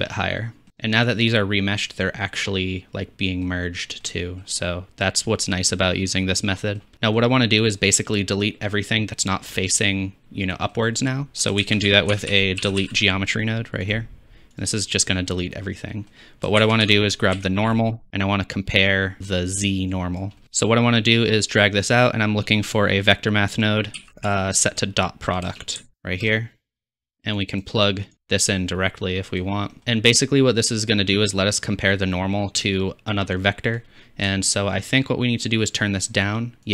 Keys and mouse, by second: 0.7 alt+z, 3.3-4.0 drag, 11.3 click, 11.6 shift+a, 16.6 shift+a, 19.9 click, 19.9 middle click, 19.9 right click, 20.4 x, 21.2-27.1 drag, 21.2-26.4 middle drag, 21.2-26.4 right drag, 27.5-28.1 drag, 28.5-31.3 drag, 35.7 shift+click.